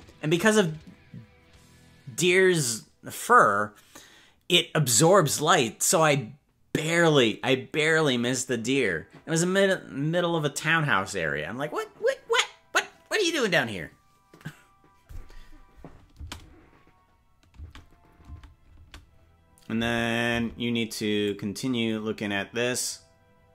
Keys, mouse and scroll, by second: 16.1 space, 17.5-20.3 typing, 21.2-23.5 drag.